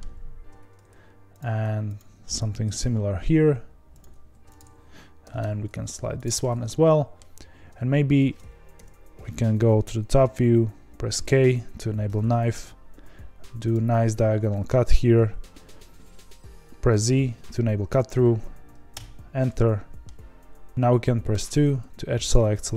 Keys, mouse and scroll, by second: 0.4 2, 1.3 click, 2.6 ctrl+b, 4.2 1, 4.5 click, 5.3 g, 6.3-8.7 middle drag, 8.7 KP_7, 11.2 k, 19.3 middle click, 20.1-20.7 scroll down 1, 20.7-21.3 scroll up 2, 21.3 2, 22.3 click.